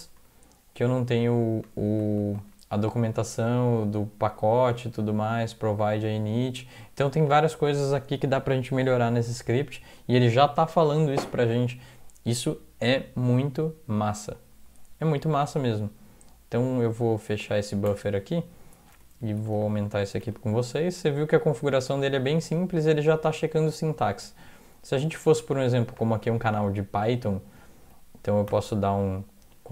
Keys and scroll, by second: 0.0 alt+Right, 0.2 alt+Right, 0.8 alt+Right, 1.7 alt+Right, 2.0 alt+Right, 2.2 alt+Right, 17.9 alt+0, 19.4 ctrl+=, 19.5 ctrl+=, 19.7 ctrl+=, 19.9 ctrl+=, 28.5 ctrl+n.